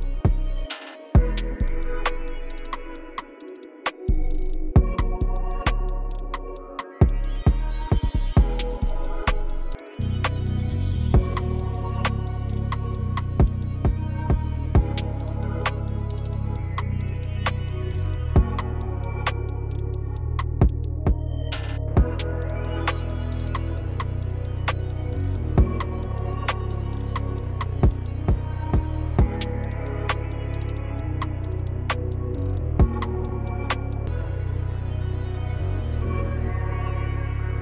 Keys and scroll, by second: 27.7 r, 29.6 ctrl+s.